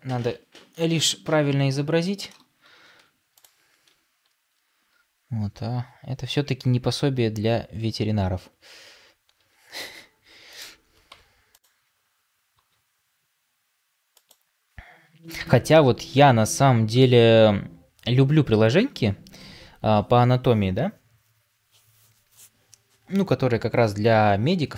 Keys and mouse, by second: 2.9 Tab, 9.3 r, 11.0 Tab, 12.5 r, 18.0 g.